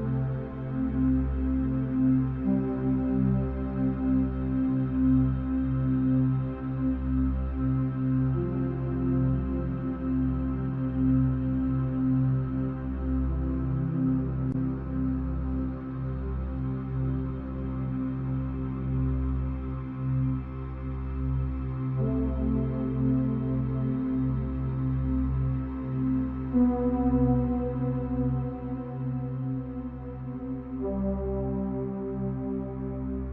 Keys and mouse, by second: 0.1 click, 0.8 shift+click, 1.7 shift+click, 3.1 shift+click, 4.8 ctrl+l, 6.5 click, 8.3 click, 9.4 click, 16.3 click, 18.6 click, 20.1 click, 22.5 click, 26.0 shift+a, 33.2 g.